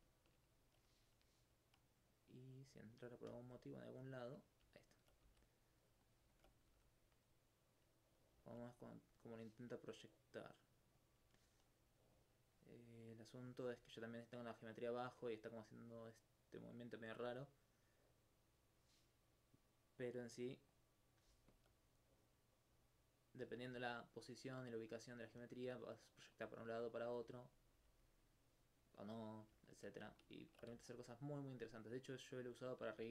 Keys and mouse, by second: 1.8 right click, 2.8 click, 3.3 click, 4.6 click, 4.8 alt+click, 5.3 alt+s, 6.1 click, 6.3 alt+click, 6.7 alt+g, 8.1 click, 8.8 right click, 10.5 click, 12.0 right click, 16.7 click, 17.2 alt+click, 17.6 right click, 20.0 click, 21.5 alt+click, 22.0 right click, 23.6 right click, 26.4 click, 26.6 alt+click, 27.2 alt+click, 27.6 click, 27.8 g, 29.3 right click, 29.7 alt+click, 30.2 alt+click, 30.3 alt+c, 31.1 click, 32.1 right click, 33.0 alt+click.